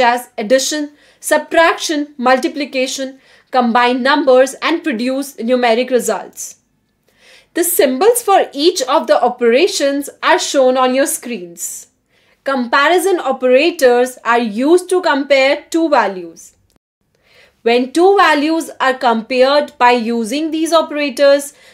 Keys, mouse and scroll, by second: 0.2 -, 0.4 Right, 0.6 Right, 1.1 BackSpace, 1.4 -, 2.1 Return, 5.7 BackSpace, 5.9 BackSpace, 6.5 BackSpace, 7.0 Num_Lock, 8.8 BackSpace, 16.1 shift+a, 16.9 5, 17.6 shift+., 19.0 shift+b, 20.1 5, 20.9 shift+-, 21.5 BackSpace.